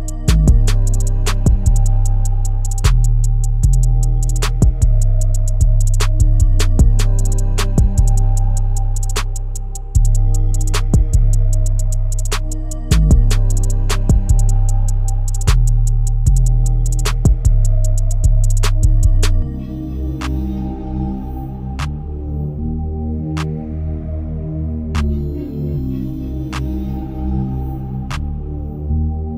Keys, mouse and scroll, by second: 16.5-17.0 scroll down 3, 17.0-17.8 scroll up 3, 19.1-22.5 drag, 23.5-23.8 scroll down 3, 24.2-24.8 shift+middle drag, 24.8-25.4 scroll up 1, 27.3-28.5 drag, 28.5 ctrl+z.